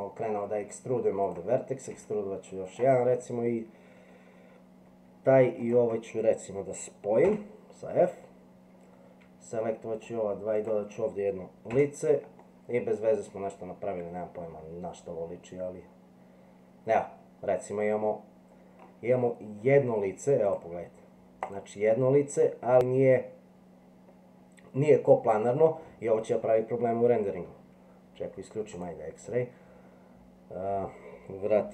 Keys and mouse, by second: 1.9 e, 7.2 f, 11.7 f, 12.4-18.8 middle drag, 20.4 click, 22.4-25.8 middle drag, 26.6 middle click, 28.8 click.